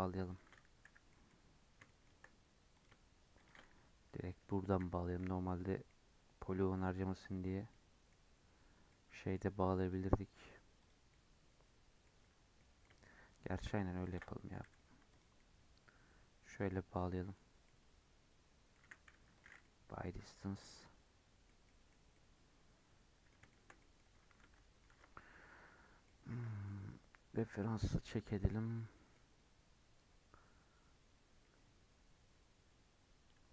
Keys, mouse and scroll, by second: 0.2 shift+click, 0.7 j, 1.0 middle click, 1.3-1.7 scroll down 5, 1.8 shift+middle click, 2.6 click, 3.3 shift+click, 4.7 j, 5.7 scroll down 2, 5.8-6.9 middle drag, 6.9 2, 7.6-9.7 middle drag, 9.7 click, 10.7 click, 11.0-12.0 middle drag, 12.0-12.5 scroll up 5, 12.5-13.9 middle drag, 13.9 ctrl+click, 14.4 g, 15.3-17.5 middle drag, 17.5 scroll down 2, 17.6-18.7 middle drag, 18.7 a, 19.0 m, 19.5 middle click, 20.0 Tab, 20.3 Tab, 20.5 middle click, 21.4 scroll down 1, 21.5 middle click, 21.8 scroll up 4, 22.0-31.7 middle drag, 33.2 Tab.